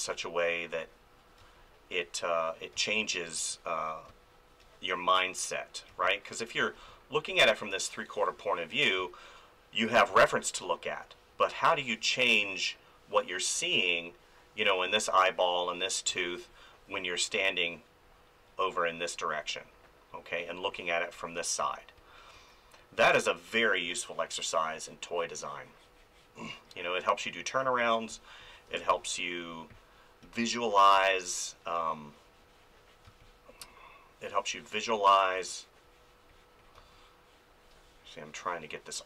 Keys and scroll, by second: 1.4 space, 5.9 space, 9.0 ctrl+z, 10.1 space, 15.1 ctrl+z, 16.4 space, 21.6 ctrl+z, 23.5 space, 28.7 space, 33.1 space, 36.7 space.